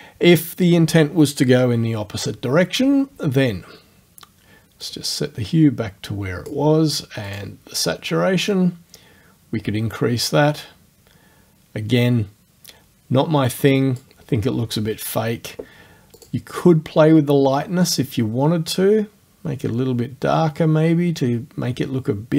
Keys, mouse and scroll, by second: 0.4 click, 4.9-6.7 drag, 7.3 click, 8.5-14.2 drag, 16.2 click, 18.0-22.3 drag.